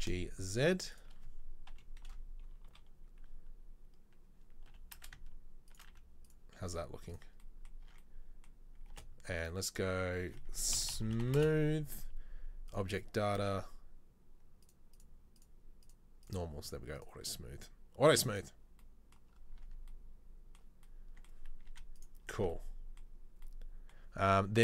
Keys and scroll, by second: 1.8 KP_3, 2.2 KP_1, 2.8 KP_3, 4.8 g, 5.9 z, 6.8 z, 8.0 Tab, 9.0 space, 19.7 Tab, 21.9 z, 22.5 Tab.